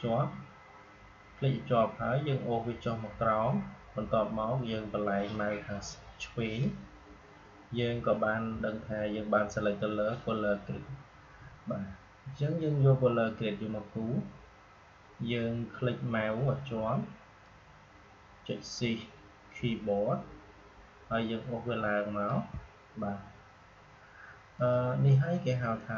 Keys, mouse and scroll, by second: 17.3-24.5 drag.